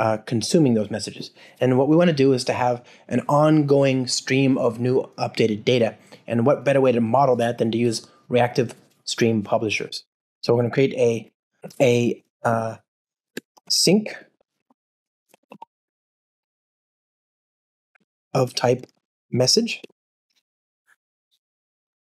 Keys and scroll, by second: 9.9 Return, 14.6 alt+BackSpace, 20.2 Return.